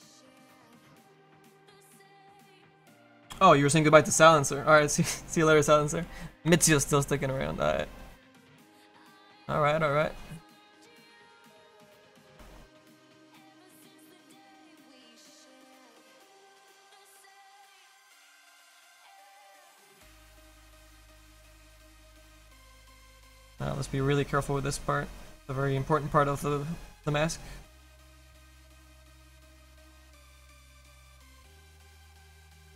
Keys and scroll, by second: 15.3 s, 31.9 Escape, 32.1 `, 32.6 Tab.